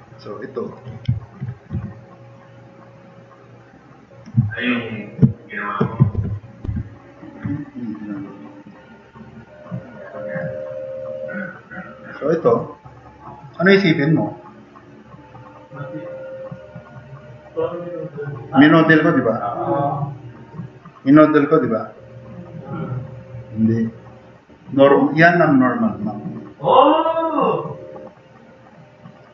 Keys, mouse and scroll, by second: 6.2 =, 6.7 =, 13.0-13.4 drag, 19.9-20.5 drag.